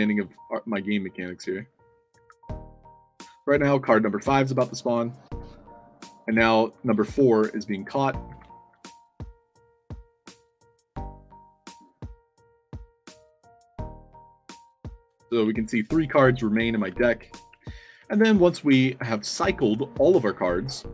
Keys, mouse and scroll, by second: 7.7 d, 8.5 w, 8.8 w, 12.2 d, 13.7 d, 14.5 s, 15.3 a, 16.4 shift+w, 16.7 a, 17.4 a, 18.0 space, 19.4 space, 19.9 a, 20.2 space.